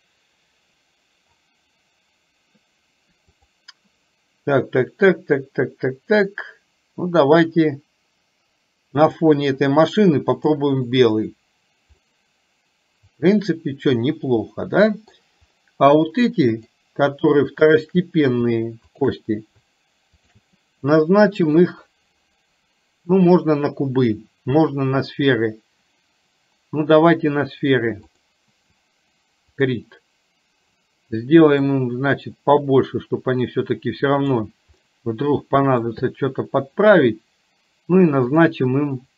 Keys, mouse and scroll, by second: 3.6-9.3 drag, 12.0-15.2 middle drag, 16.6 click, 20.3 shift+click, 21.6-28.5 drag, 29.7 click, 31.6-34.3 drag, 34.9-36.0 middle drag.